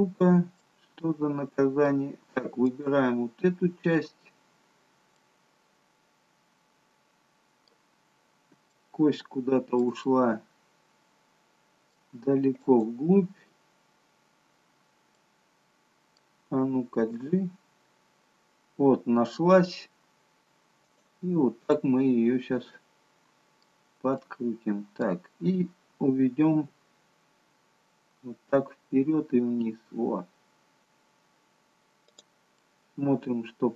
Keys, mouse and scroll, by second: 0.5 middle click, 0.5 scroll up 1, 2.6 click, 3.9-4.4 scroll down 2, 5.2 middle click, 8.1-8.7 scroll up 2, 8.7 shift+middle click, 10.0 middle click, 12.6 click, 14.2-15.5 scroll down 5, 15.1 middle click, 17.6 g, 21.7 middle click, 24.2 middle click, 26.5 g, 32.6 middle click.